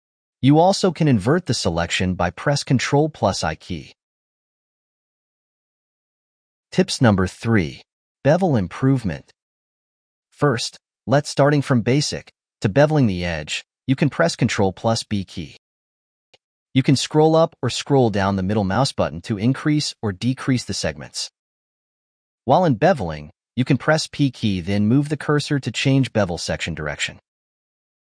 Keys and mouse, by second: 0.3 alt+shift+click, 1.3 ctrl+i, 2.2 ctrl+i, 2.4 ctrl+i, 3.2 click, 4.2 ctrl+i, 5.0 ctrl+i, 5.7 click, 10.4-13.0 shift+middle drag, 13.0 alt+shift+click, 14.1 ctrl+b, 14.3 ctrl+b.